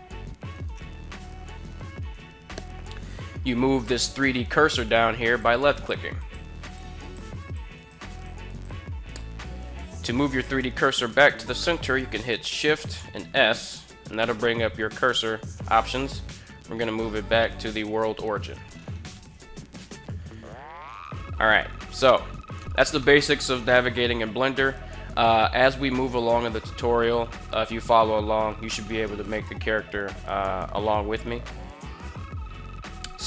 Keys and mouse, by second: 0.3 right click, 1.8 right click, 5.4 click, 6.4 click, 6.8 click, 7.1-7.6 drag, 7.8 drag, 8.3 click, 12.9 shift+s, 22.8-23.2 middle drag, 23.4 middle drag, 23.6-24.5 middle drag.